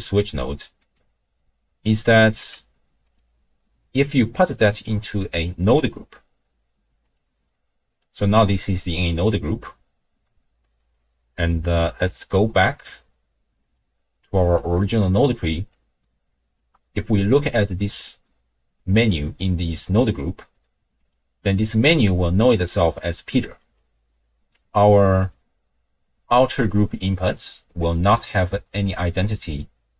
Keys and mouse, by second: 2.4 n, 3.1-7.2 drag, 11.0-12.0 drag, 13.7 click, 14.7 middle click, 16.3 ctrl+click, 21.0 click, 27.8 click.